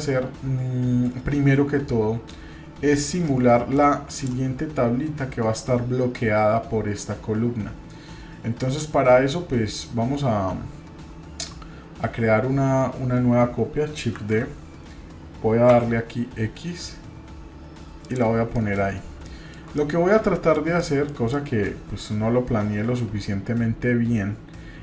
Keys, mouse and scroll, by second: 3.3-3.8 middle drag, 4.1 click, 14.2 shift+d, 18.5 middle drag, 18.9 scroll up 1, 19.2 shift+middle click, 19.8-21.2 middle drag, 21.3 middle click.